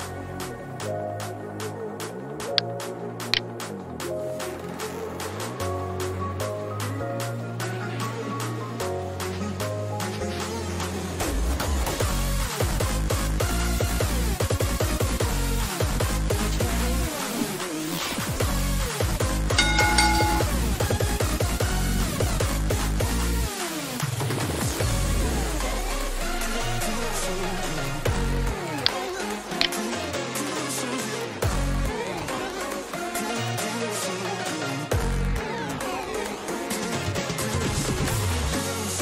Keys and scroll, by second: 0.0-0.7 typing, 10.7 ctrl+shift+Escape, 30.5-31.9 typing, 32.6 Return.